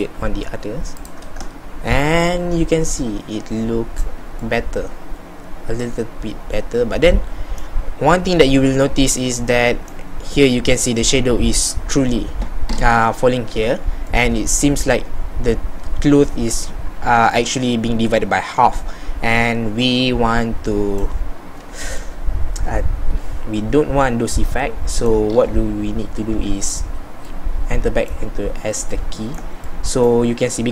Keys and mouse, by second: 22.6 middle click, 26.4 z.